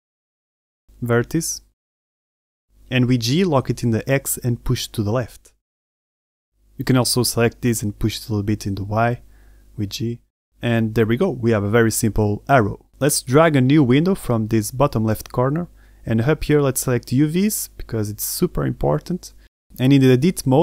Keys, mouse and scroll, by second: 0.1 z, 0.1 a, 0.2 b, 2.6-3.3 scroll down 3, 3.4 shift+middle click, 4.2 g, 6.6 shift+middle click, 7.2 a, 7.4 b, 8.0-8.4 scroll down 1, 8.4 g, 11.1 middle click, 11.5 z, 11.7 middle click, 12.3 Tab, 12.5 middle click, 12.8 scroll down 1, 13.1 middle click, 13.8 scroll down 2, 15.1 click, 18.2 click, 18.9 middle click, 19.4-20.1 scroll up 2, 20.1 middle click.